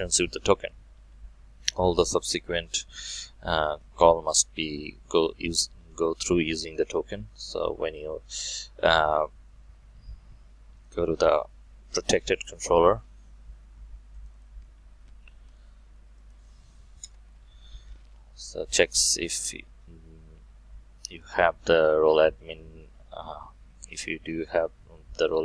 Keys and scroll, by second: 7.0 alt+1, 17.0 ctrl+shift+KP_Add.